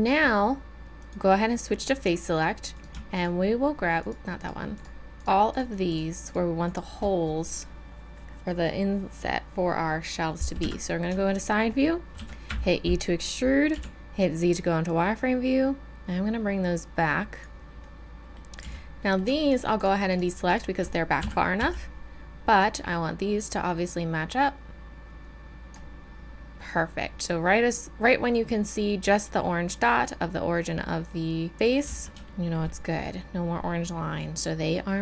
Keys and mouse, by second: 1.0-2.7 drag, 4.8-10.6 drag, 10.6 KP_3, 11.3-13.7 drag, 12.1 e, 13.7 z, 14.8-16.1 drag, 17.8-21.2 middle drag, 18.6 z, 21.2 KP_3, 21.6 z, 31.8 z, 32.9 middle click, 34.7 middle click.